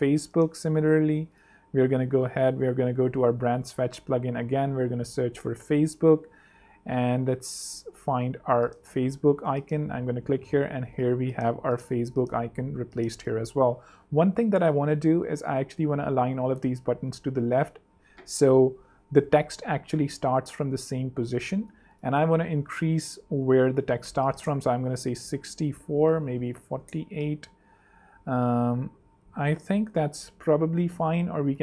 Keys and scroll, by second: 0.0-0.8 typing, 2.5 super+p, 2.6-5.7 typing, 11.2 super+3, 12.4 super+2, 18.1 super+3, 19.2 super+2, 22.7 8, 23.3 super+8, 23.3 super+a, 23.4 super+4, 23.9 super+8, 24.1 super+6, 24.2 4, 24.3 Return, 24.8 super+3, 25.8 super+2, 26.5 super+4, 26.6 8, 26.8 Return, 27.1 super+3, 29.9 super+2.